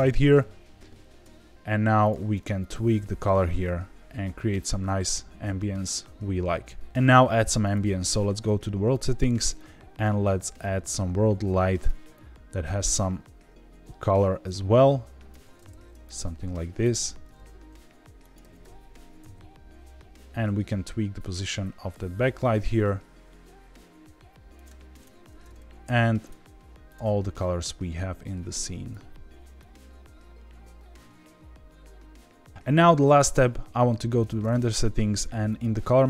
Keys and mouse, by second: 7.6 click, 8.9 click, 16.0 click, 16.8 click, 17.2 g, 17.3 z, 18.2 click, 18.4 g, 18.6 y, 19.1 x, 24.5 click, 24.9 click, 26.2 click, 26.8 click, 35.4 click.